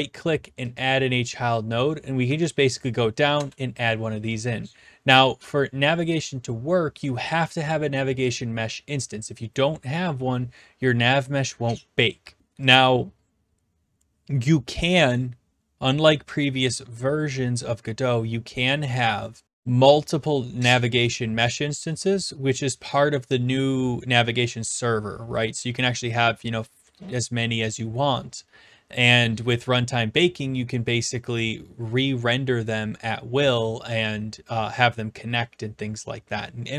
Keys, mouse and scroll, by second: 0.8-1.8 drag, 3.4 Return, 12.4-12.7 scroll down 6, 12.7 click.